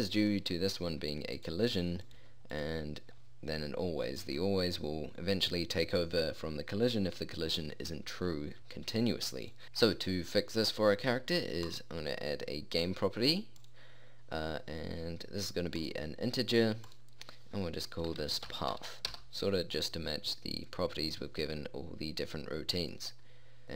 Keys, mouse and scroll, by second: 0.8-1.8 middle drag, 1.8-8.3 drag, 11.2-12.2 drag, 17.5-19.6 drag, 21.0-23.7 drag.